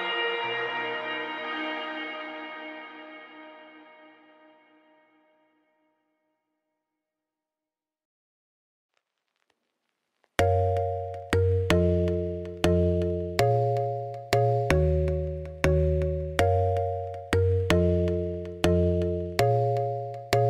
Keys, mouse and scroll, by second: 1.9 middle click, 2.5 click, 8.7 click, 8.9 click, 9.4 click, 9.8 middle click, 10.2 x, 10.5 middle click, 11.1 click, 12.2 z, 12.8 click, 13.7 click, 14.6-15.7 drag, 15.8 scroll down 5, 16.0 middle click, 16.7 scroll up 1, 16.9-19.0 drag, 19.0 ctrl+p, 19.5 click, 19.9 g.